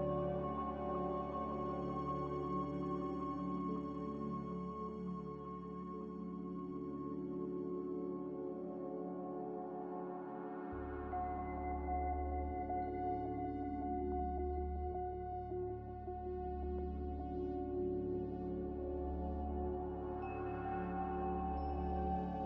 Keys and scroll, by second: 0.0-2.3 typing.